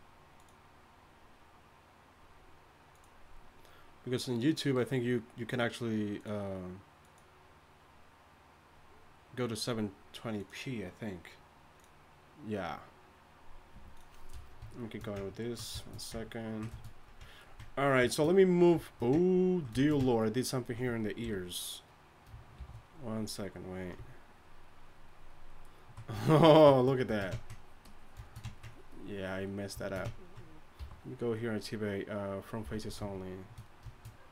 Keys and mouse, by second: 14.9-19.4 middle drag, 21.2 KP_1, 22.6 shift+f, 27.5-31.0 drag, 31.0 t, 32.6 t, 32.8-34.3 drag.